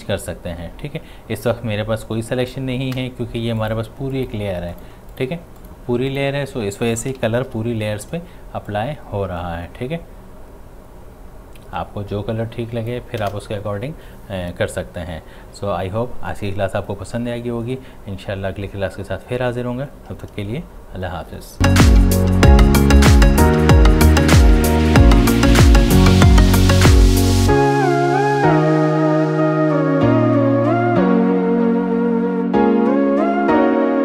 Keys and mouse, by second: 7.5 ctrl+u, 8.7-15.2 drag.